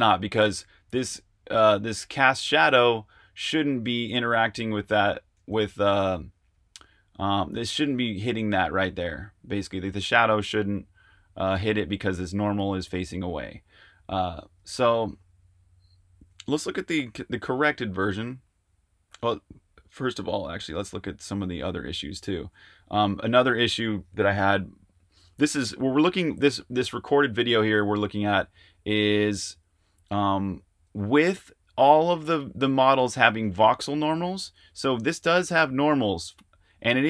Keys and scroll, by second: 14.9 super+Tab, 16.2-16.9 typing, 18.1 super+Tab, 18.3 typing, 19.9-21.6 typing, 27.3-29.4 typing.